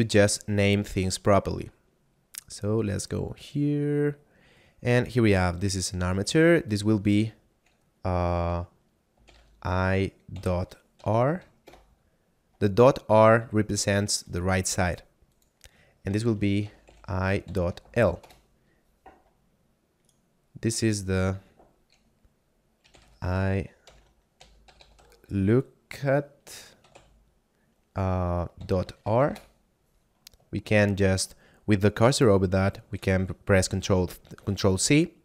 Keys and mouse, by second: 1.2 middle click, 6.7 click, 9.1 e, 9.2 y, 9.3 e, 10.9 shift+r, 11.7 Return, 14.3 right click, 15.3 click, 16.5 e, 16.7 y, 16.9 e, 17.7 shift+l, 18.3 Return, 20.0 right click, 21.1 click, 22.8 e, 22.9 y, 23.0 e, 24.3 l, 24.5 o, 24.9 k, 26.6 a, 26.9 t, 29.0 shift+r, 29.3 Return, 33.9 ctrl+c.